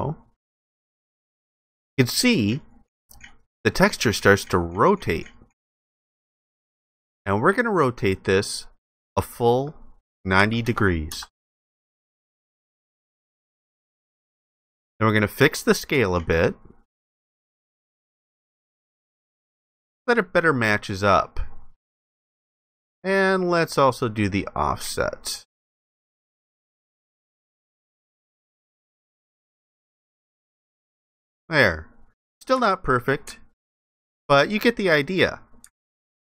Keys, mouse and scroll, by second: 10.4 typing, 11.1 Return, 33.3 alt+click, 34.5 alt+click.